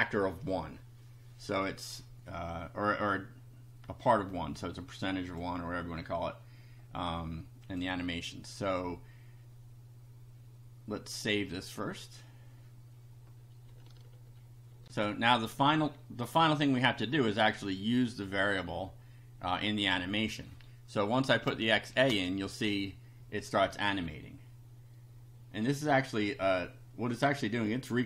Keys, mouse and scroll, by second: 4.0-5.2 drag, 5.3 click, 7.6 click, 11.4 click, 14.8 ctrl+r, 17.1 click, 21.9 shift+a.